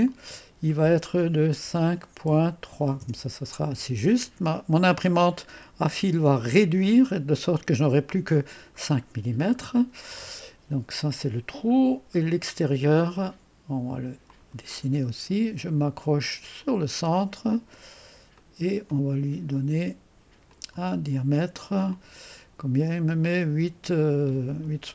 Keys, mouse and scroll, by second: 0.0 click, 2.4-3.2 typing, 5.6-8.9 middle drag, 9.0-9.6 scroll down 2, 11.8-12.4 scroll down 2, 12.4 scroll down 1, 14.2 click, 16.5 click, 17.1 click, 18.3 click, 18.9 middle click, 18.9 right click, 20.4 click, 21.9 click.